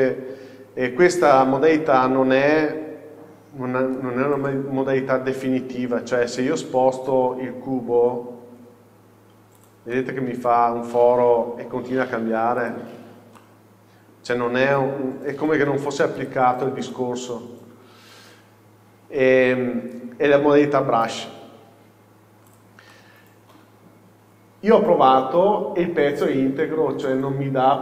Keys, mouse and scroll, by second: 1.4-5.2 middle drag, 6.3 g, 9.8 click, 10.0-12.8 middle drag, 11.6 g, 12.8-13.4 drag, 13.1-13.4 scroll down 1, 13.4-14.6 middle drag, 14.6-15.2 scroll up 3, 14.7 middle click, 15.2 g, 16.4 click, 16.7 scroll down 1, 17.0-22.6 middle drag, 22.6-23.0 drag, 23.0-27.8 middle drag.